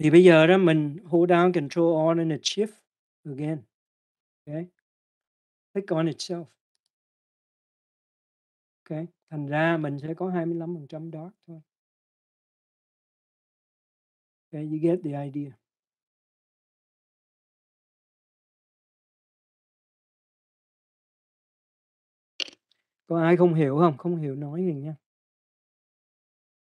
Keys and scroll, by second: 22.4-25.2 typing.